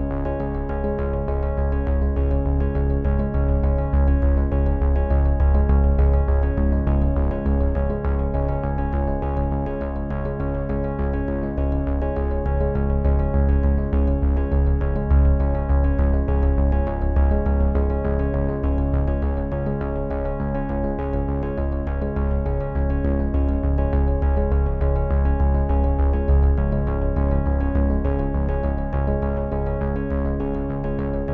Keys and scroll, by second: 1.2 f, 4.5 f, 7.5 f, 10.7 f, 12.9 v.